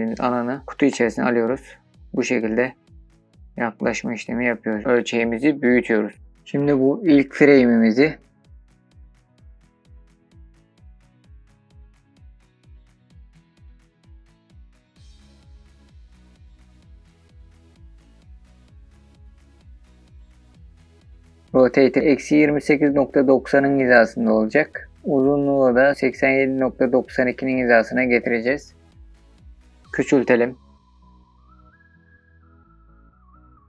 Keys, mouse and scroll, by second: 3.9-4.6 drag, 7.4-9.6 drag, 10.0-11.9 scroll up 20, 10.1 middle click, 10.2 alt+middle click, 10.3 middle click, 10.7 click, 10.9 shift+middle click, 11.1 shift+middle click, 11.2 shift+middle click, 11.3 shift+middle click, 11.5-13.2 typing, 11.7 click, 12.6 click, 12.8 click, 12.9 shift+middle click, 12.9 scroll up 1, 13.1 click, 13.3 click, 13.5 shift+middle click, 13.5 scroll up 2, 14.5 click, 14.6-17.4 typing, 14.7 click, 15.2 click, 15.4-16.2 scroll down 18, 15.5 click, 15.6 shift+middle click, 16.0 shift+middle click, 16.1 shift+middle click, 16.6 click, 16.8 click, 17.0 click, 17.2 click, 17.6 shift+middle click, 17.7 scroll up 8, 17.8 shift+middle drag, 18.3 shift+middle click, 18.4 s, 18.5 click, 18.7 r, 18.9 click, 19.0 shift+middle click, 19.2-19.5 scroll up 15, 19.5 scroll down 3, 19.6 middle click, 20.1-24.2 typing, 20.3 click, 20.3 scroll down 5, 20.5 shift+middle click, 21.2 click, 21.4 click, 21.5 shift+middle click, 21.5 scroll up 3, 22.0 click, 22.8 click, 23.0 click, 23.2 scroll up 9, 23.5 shift+middle click, 23.8 click, 24.1 click, 24.3 click, 29.9-31.2 scroll down 12, 31.8 middle click, 32.4-33.6 scroll down 15.